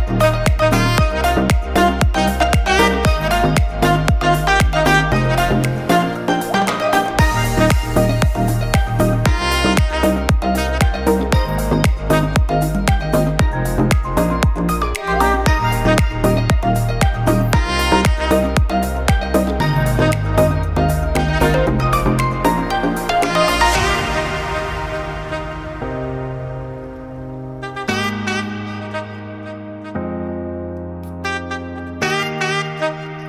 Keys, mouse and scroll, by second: 2.3 ctrl+click, 2.8 middle click, 4.0 ctrl+e, 5.8 alt+a, 7.4 middle click, 8.3 scroll up 1, 8.6 shift+middle click, 9.7 middle click, 9.9-10.5 scroll up 1, 10.7 click, 11.0 middle click, 12.2-13.0 scroll down 2, 12.7 middle click, 13.9 ctrl+click, 14.3 ctrl+middle click, 16.1 ctrl+e, 16.8 middle click, 17.6-18.9 scroll up 3, 17.9 middle click, 18.9 click, 19.3 middle click, 23.4 ctrl+click, 24.0 middle click, 26.0 ctrl+e, 27.1 alt+a, 27.3-27.8 scroll down 3, 27.6 middle click, 28.7 middle click, 29.3 Tab, 30.3 n.